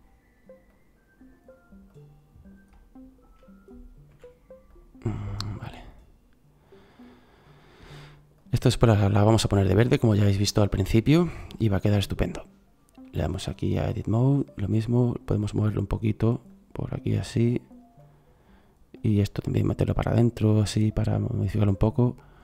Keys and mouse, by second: 4.1 s, 10.2-11.5 middle drag.